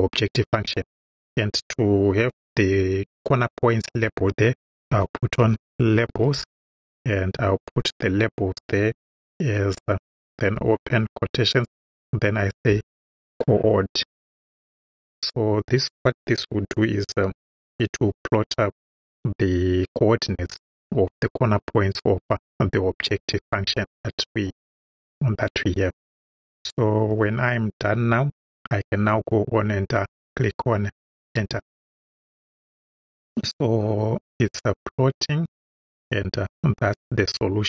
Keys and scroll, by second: 4.6-6.9 typing, 7.9 =, 11.0 shift+', 12.7 c, 13.1 o, 14.1 r, 14.5 d, 26.5 Right, 31.2 Return.